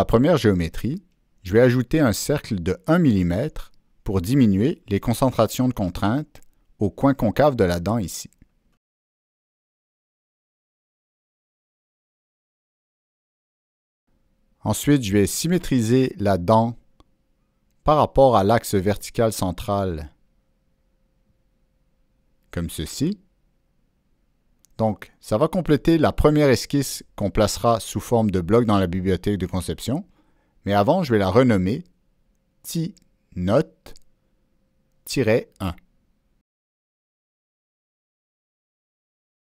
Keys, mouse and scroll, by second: 2.0 click, 3.2 right drag, 6.9 click, 7.8 click, 8.6 Escape, 8.7 Escape, 9.2 right drag, 10.1 click, 10.6 click, 11.3 Escape, 11.3 right click, 11.3 click, 12.0 Return, 12.7 Escape, 13.6 click, 16.0-17.2 ctrl+middle drag, 17.5-18.5 drag, 20.1 click, 21.3 click, 22.6 click, 24.0 click, 25.8 ctrl+middle click, 26.3 ctrl+scroll up 1, 28.0 click, 30.6 click, 32.5 click, 33.5 click, 34.1 click, 35.7 Caps_Lock, 37.9 Caps_Lock, 37.9 click, 38.3 Return.